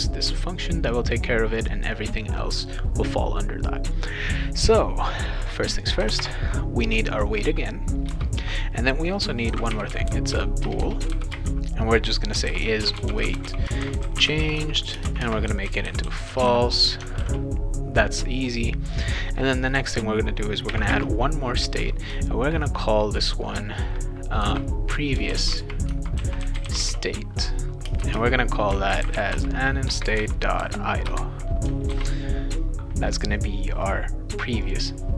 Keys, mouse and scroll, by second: 1.6 click, 2.6 click, 5.7 click, 6.0 BackSpace, 6.2 BackSpace, 7.1 click, 8.1 Return, 9.2-16.9 typing, 17.2 ctrl+s, 18.9 click, 20.7 ,, 20.9 space, 24.4-30.6 typing, 29.8 Return, 31.0 Return, 31.9 ctrl+s, 34.6 click.